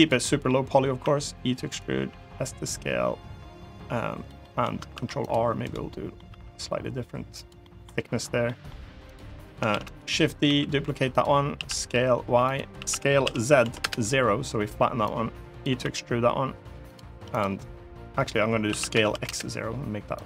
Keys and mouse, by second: 0.0 middle click, 0.8 e, 1.4 click, 1.7 s, 4.0 click, 4.2 middle click, 4.7 ctrl+r, 5.4 right click, 5.7 middle click, 6.0 s, 7.1 click, 7.4 middle click, 7.9 3, 8.2 middle click, 8.8 click, 9.5 shift+d, 9.7 click, 10.2 s, 11.3-13.4 typing, 12.2 click, 13.6 Return, 14.8 click, 15.6 e, 17.1 click, 18.4 s, 18.9 x, 18.9 0, 19.0 Return, 20.0-20.2 drag.